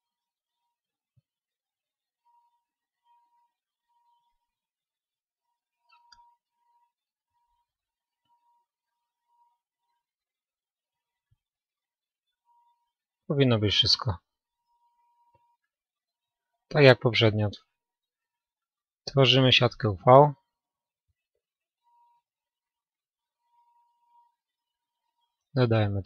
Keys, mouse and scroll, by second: 2.8-5.3 middle drag, 10.8-18.8 middle drag, 18.8-23.1 drag, 23.1 u.